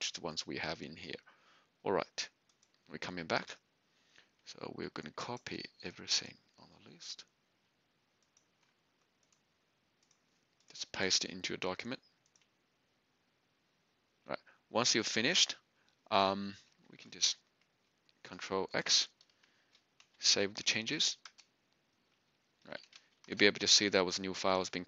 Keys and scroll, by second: 18.6 ctrl+x, 20.0 y, 21.2 Return, 22.5-23.4 typing.